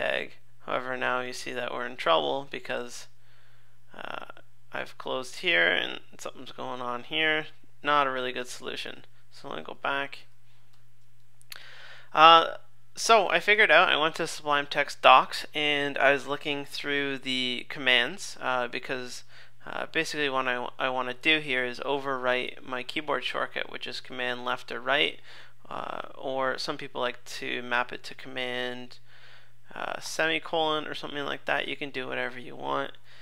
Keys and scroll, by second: 8.5 super+z, 9.0 super+z, 20.1 super+Tab, 22.5 super+Left, 23.1 super+Left, 24.1 super+Left, 24.3 super+Right, 24.4 super+Left, 24.6 super+Right, 24.9 super+Left, 25.1 super+Right, 25.2 super+Left, 30.0 super+;.